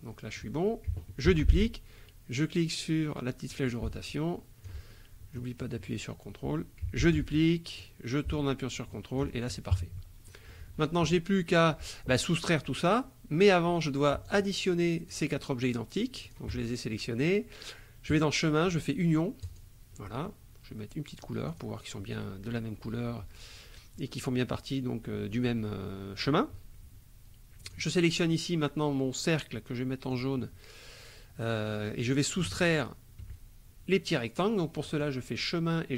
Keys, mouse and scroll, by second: 0.0 ctrl+middle click, 1.2 ctrl+d, 3.5-4.8 drag, 4.9 ctrl+click, 7.0 ctrl+d, 7.8-9.4 drag, 9.7 ctrl+KP_Subtract, 10.3 click, 14.2 shift+click, 15.1 shift+click, 16.2 shift+click, 18.1 click, 19.4 click, 21.5 click, 27.6 click, 30.1 click, 32.7 shift+click, 34.8 click.